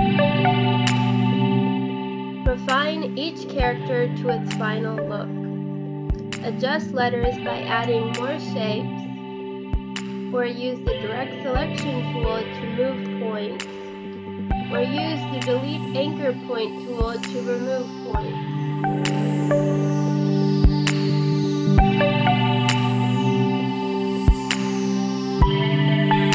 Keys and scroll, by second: 1.6 space, 4.9 space, 9.6 space, 10.6 Right, 11.6 space, 13.7 space, 16.1 space, 16.3 space, 20.3 space, 21.4 Delete, 22.1 space, 22.6 Delete.